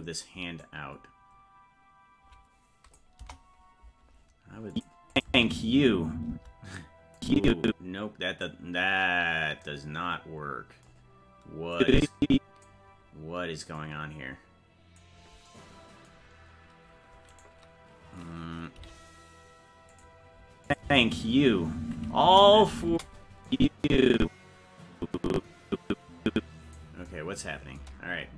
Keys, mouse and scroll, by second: 0.6-3.0 drag, 3.2 KP_0, 4.7 click, 5.1 click, 5.3 space, 7.2-8.4 drag, 11.7 click, 13.7-15.0 drag, 17.3-18.8 right drag, 18.8 g, 20.7 click, 20.8 space, 22.3 KP_0, 22.9 space, 23.5-26.8 drag.